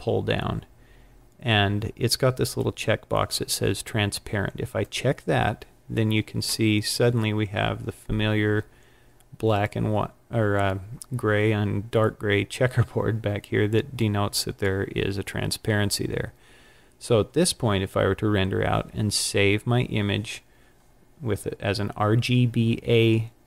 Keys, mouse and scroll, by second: 4.7 click.